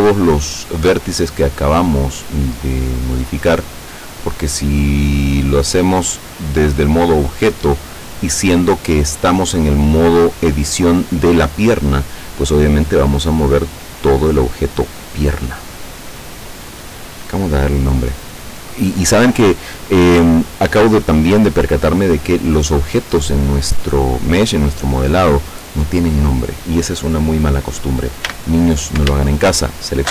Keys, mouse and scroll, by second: 0.8 click, 13.1-14.9 drag, 28.3 a, 30.0 alt+shift+right click.